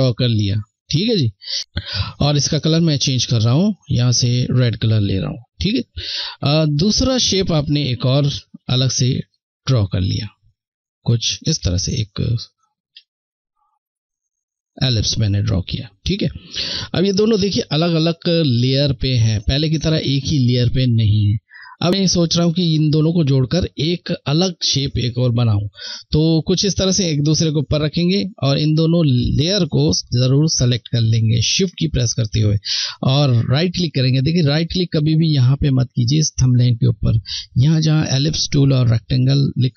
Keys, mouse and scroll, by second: 2.1 click, 14.2 click, 29.7 shift+Num_Lock, 29.7 click, 30.1 shift+click, 39.6 Right.